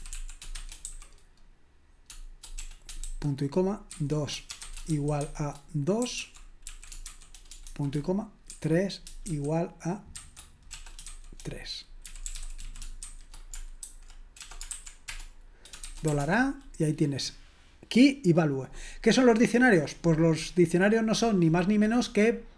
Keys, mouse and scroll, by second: 0.0-0.9 typing, 3.9-11.0 typing, 12.1-16.2 typing.